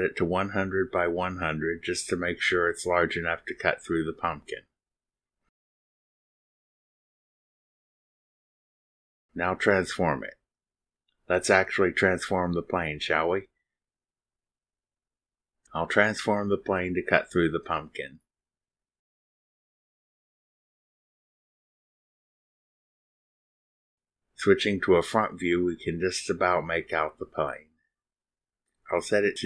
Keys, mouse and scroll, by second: 0.5 click, 0.9 click, 1.3-2.8 typing, 3.8 click, 6.5 click, 7.6 right click, 10.0 click, 11.6 click, 15.1 click, 15.7 click, 17.4 click, 19.6 click, 21.1 click, 23.6 click, 24.8 middle click, 25.3 middle click, 25.5 click, 27.0 click, 27.6 click, 28.2 middle click.